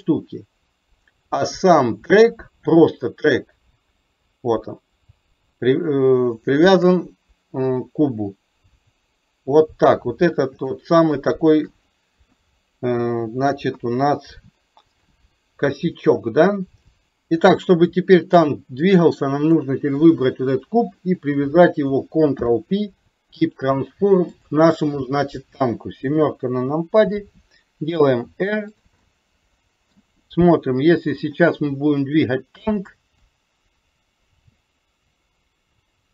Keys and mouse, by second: 1.6 click, 6.8 shift+click, 10.8-11.3 shift+middle drag, 11.4 shift+middle click, 12.3 KP_1, 13.8 KP_3, 17.0 middle click, 18.3 click, 19.0-19.7 middle drag, 21.2 shift+click, 22.4 ctrl+p, 24.4 click, 26.3 KP_7, 28.1 r, 29.1 middle click, 32.1 click, 33.3-36.1 drag.